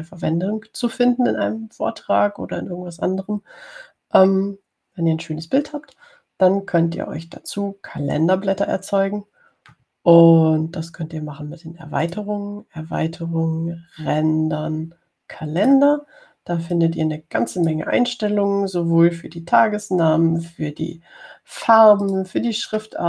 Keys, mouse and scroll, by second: 13.3 click, 16.8 click, 18.0-19.1 drag.